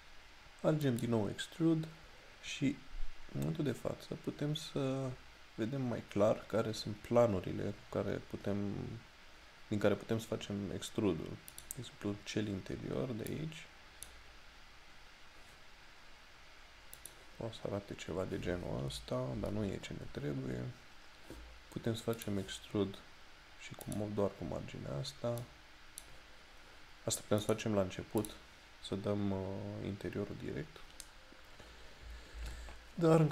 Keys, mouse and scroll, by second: 11.6 click, 17.0 click.